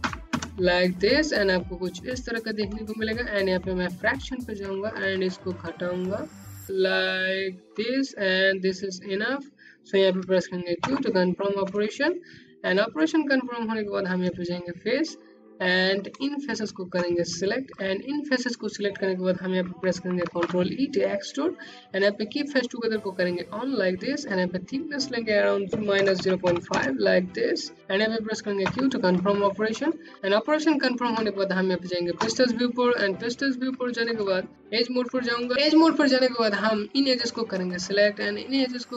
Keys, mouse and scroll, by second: 1.8 click, 3.6 ctrl+middle click, 9.2 q, 11.2 right click, 14.2 click, 14.9 click, 18.6 e, 20.8 click, 24.0 KP_0, 24.2 KP_Decimal, 24.9 BackSpace, 25.7 KP_Enter, 27.8 scroll up 1, 28.3 middle click, 28.8 scroll up 1, 30.2 Home, 30.2 space, 32.0 middle click, 33.6 right click, 35.5 click, 36.8 shift+click.